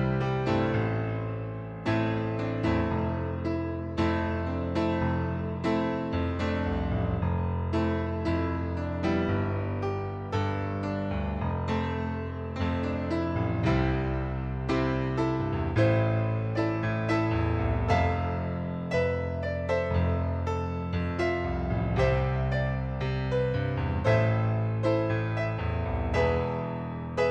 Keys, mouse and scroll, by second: 1.2 click, 2.2 KP_6, 2.5 Return, 3.3 click, 3.7 KP_6, 4.0 Return, 4.8 right click, 6.1 click, 6.8 click, 10.3 middle click, 13.5 click, 15.9 click, 17.2 click, 18.6 click, 20.4 click, 21.4 KP_2, 21.7 Return, 22.3 click, 22.8 KP_2, 23.1 Return, 23.7 right click, 24.7 click.